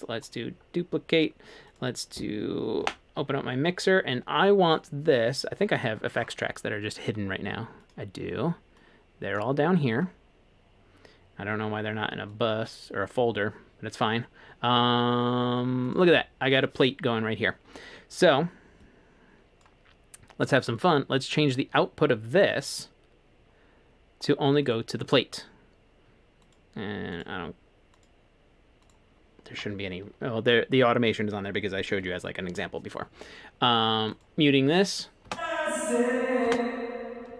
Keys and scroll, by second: 2.8 F3, 35.3 space, 36.5 space.